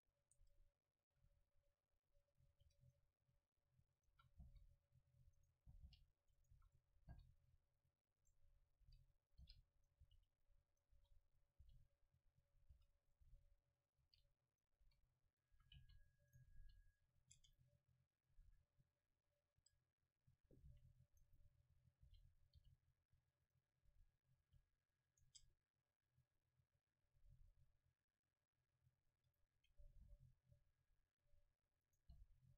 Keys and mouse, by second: 0.4 Tab, 1.2 a, 2.5 ctrl+r, 4.1-5.9 drag, 4.1 a, 4.6 c, 5.7 g, 6.6 a, 7.1-8.3 middle drag, 7.1 c, 8.3 click, 8.9-11.7 typing, 10.1-11.7 drag, 12.5-16.7 drag, 12.8-16.6 typing, 17.4 Tab, 18.5 a, 19.1 click, 19.6 Tab, 20.7 c, 21.3 click, 22.1 g, 22.6 r, 23.8 g, 24.3-27.0 drag, 24.5 r, 25.3 Tab, 29.2 Tab, 29.4-31.9 middle drag, 30.1 c, 32.2 g.